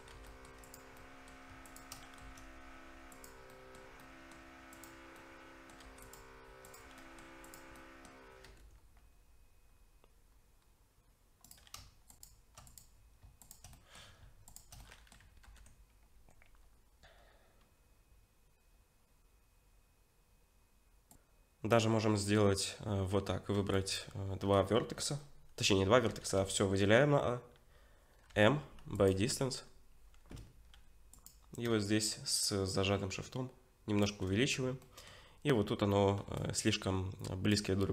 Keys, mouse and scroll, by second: 0.1 3, 0.3 middle click, 0.6 click, 1.0 middle click, 1.7 shift+click, 2.0 middle click, 2.2 x, 3.5 middle click, 4.0 middle click, 4.7 click, 5.2 middle click, 5.8 2, 6.0 click, 7.0 middle click, 7.5 click, 7.8 middle click, 8.5 ctrl+b, 12.1 shift+click, 12.7 click, 13.4 shift+click, 13.7 middle click, 14.5 shift+click, 14.8 middle click, 15.4 ctrl+b, 21.1 middle click, 23.3 scroll up 2, 23.5 1, 23.7 click, 24.2-25.6 scroll up 1, 25.6-26.7 scroll down 3, 26.1 a, 28.3 m, 29.4-30.3 scroll up 2, 31.1 click, 32.7 shift+click, 34.8 middle click, 35.8 scroll up 2, 36.2 1, 36.4 click, 37.8-37.9 scroll down 4.